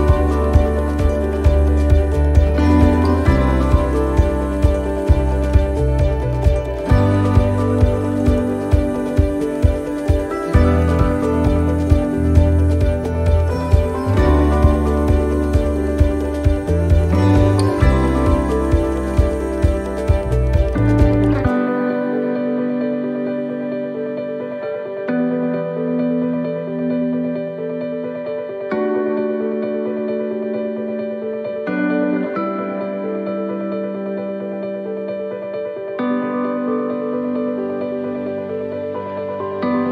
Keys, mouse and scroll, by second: 0.4 click, 1.4 middle click, 3.1 r, 5.8 middle click, 6.7 e, 9.1 middle click, 9.3-9.7 scroll down 1, 10.6 click, 10.6 scroll down 1, 13.2 middle click, 14.1 scroll up 2, 15.3 click, 17.0 middle click, 17.3-17.9 scroll up 3, 17.7 middle click, 17.9 scroll down 1, 18.3 middle click, 18.8 scroll down 1, 19.4 middle click, 21.7 middle click, 25.3 middle click, 25.3 l, 26.2 middle click, 27.2 ctrl+r, 30.7 click, 31.3 middle click, 31.9-32.3 scroll up 1, 32.3 middle click, 33.7 middle click, 34.4 ctrl+r, 37.3 ctrl+r, 39.3 ctrl+r.